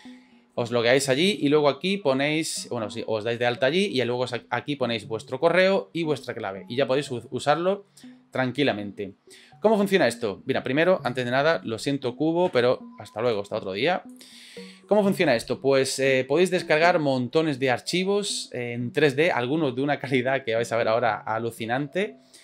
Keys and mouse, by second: 11.1 click, 14.2 click.